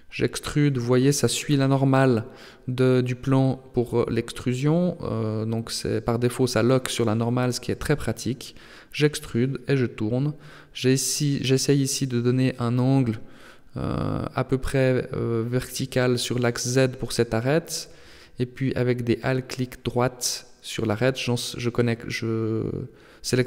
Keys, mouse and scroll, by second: 0.3 e, 1.7 r, 4.3 g, 7.9 e, 9.1 r, 12.8 g, 15.3 alt+right click, 16.9 g, 19.4 alt+right click, 20.3 g, 22.0 middle click.